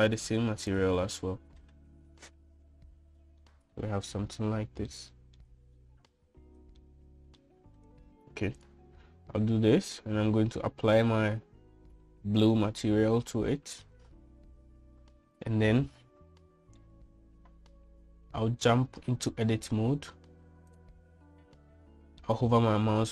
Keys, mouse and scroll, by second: 0.3-1.8 drag, 4.5 middle click, 5.9-6.4 shift+middle drag, 7.9 shift+middle click, 9.6 click, 11.9-13.5 drag, 20.3 Tab, 21.7 click.